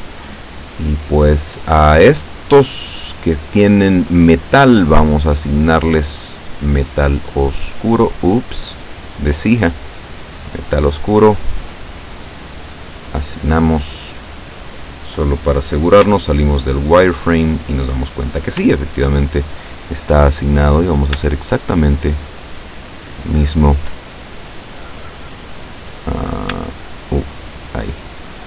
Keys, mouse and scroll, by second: 4.8 click, 6.2 click, 7.4 click, 9.4 click, 10.6 click, 12.3 click, 13.0 click, 16.1 z, 17.1-17.5 scroll down 2, 18.1-18.5 scroll up 2, 18.7 z, 20.7 right click, 21.5 shift+right click, 23.1 shift+right click, 24.3-26.7 shift+middle drag, 27.1 shift+right click, 27.7 shift+right click.